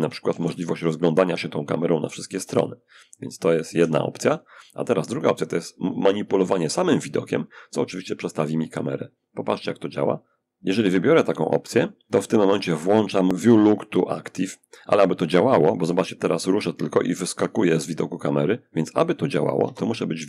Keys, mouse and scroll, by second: 3.0 Escape, 7.9 click, 13.2 click, 15.5-18.6 middle drag, 18.9 0.